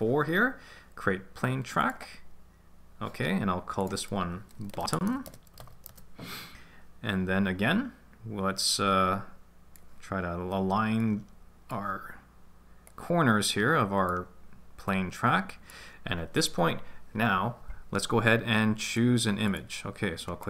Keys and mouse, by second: 1.8 click, 3.9-6.0 drag, 5.2 t, 8.6 click, 11.0 click, 12.9 click, 14.9-19.5 drag, 20.4 click.